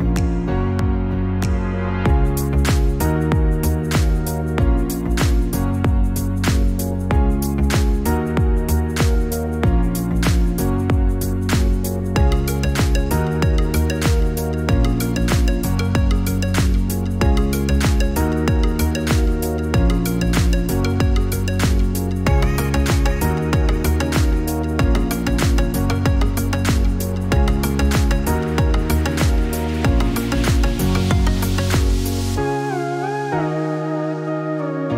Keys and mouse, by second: 1.0-6.1 drag, 7.1-11.8 drag, 8.7 BackSpace, 8.8 BackSpace, 16.8 click, 25.4 alt+shift+click.